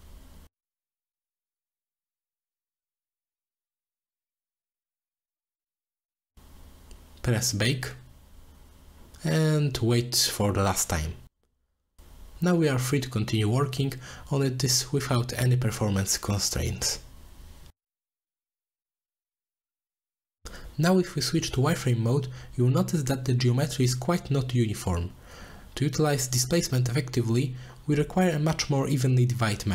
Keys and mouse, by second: 1.8 middle click, 2.8-4.6 drag, 6.9-12.0 drag, 12.0 click, 14.6 middle click, 15.8-16.4 middle drag, 18.8 click, 19.0-19.7 drag, 21.1 click, 21.9 click, 22.4-23.6 middle drag, 24.7-25.2 drag, 27.5 middle click, 28.0-29.1 drag, 29.2 middle click.